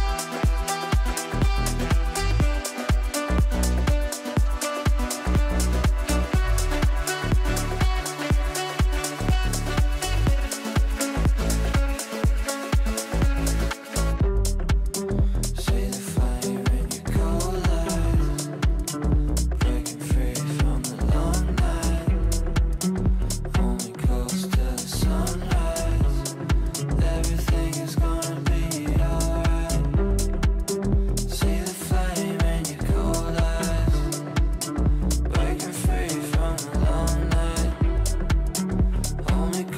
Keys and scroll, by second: 8.2 Delete, 10.6 shift+F2, 10.8 Escape, 15.1 g, 23.3 g.